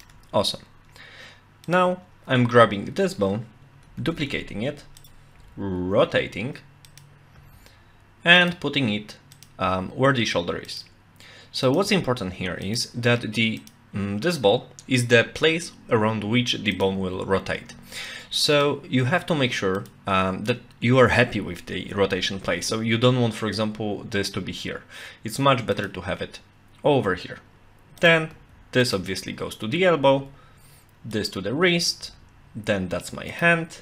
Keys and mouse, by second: 1.7 click, 4.0 shift+d, 5.0 click, 5.4 r, 7.4 g, 9.3 click, 9.6 g, 11.7 click, 11.9 g, 13.6 click, 16.8 click, 17.0 g, 19.8 click, 22.4 g, 28.0 click, 28.3 g, 30.2 e, 31.1 click, 32.0 e, 33.3 click.